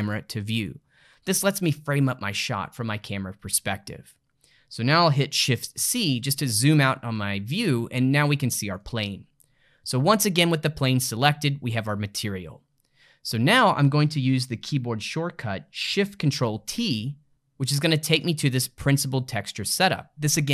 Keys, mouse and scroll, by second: 0.5 click, 5.8 shift+c, 8.0-9.0 ctrl+middle drag, 9.0 click, 11.0-14.0 middle drag, 16.6 ctrl+shift+t.